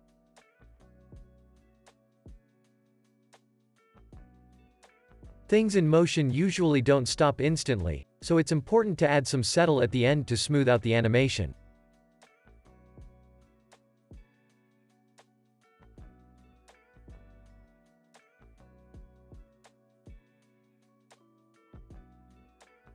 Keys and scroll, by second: 0.9 space, 2.6 space, 2.8 super+s, 7.4 alt+x, 9.5 alt+z, 10.1 alt+x, 10.9 super+c, 11.1 super+v, 14.6 super+s, 17.6 super+s, 18.4 space, 20.3 space, 20.6 super+s, 22.0 space.